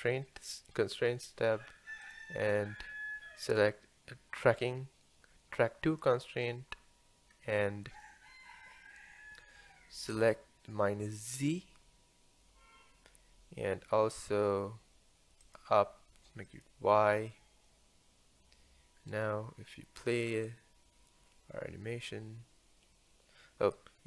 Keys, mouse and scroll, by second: 2.0-5.8 drag, 7.3-9.0 scroll up 1, 9.0-10.3 scroll up 1, 11.3 click, 15.4-18.5 drag, 20.6-23.7 drag.